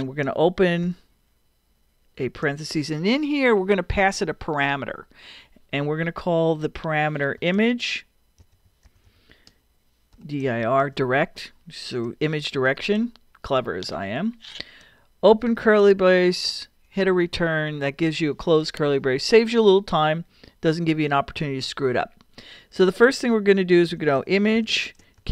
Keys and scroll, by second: 0.8 shift+9, 7.4-11.3 typing, 12.7 shift+0, 15.5 shift+[, 16.8 Return, 23.6-25.3 typing.